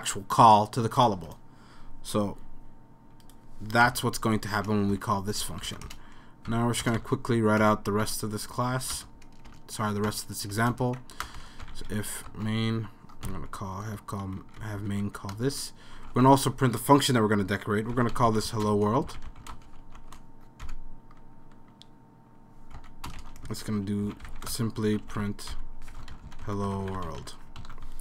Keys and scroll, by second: 3.9 BackSpace, 4.2 r, 5.6 Right, 5.9-7.6 typing, 8.7 End, 8.9 Return, 9.5 BackSpace, 10.5-12.2 typing, 11.3 Return, 11.4 Return, 14.3 Right, 14.6 Up, 14.8 Up, 15.0 Up, 15.4 Return, 15.7-20.5 typing, 20.7 Left, 22.8 Right, 23.2-27.7 typing, 23.5 Return.